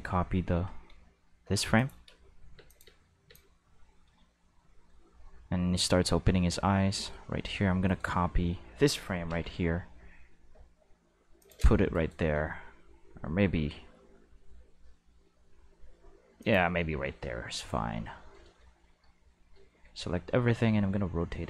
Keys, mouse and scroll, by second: 1.7 click, 2.0 space, 2.5 space, 2.6 click, 2.8 space, 3.2 space, 3.3-5.7 drag, 7.8 right click, 9.2 shift+d, 11.4 click, 11.9 right click, 12.3 g, 16.4 click, 19.7 a, 20.3 r.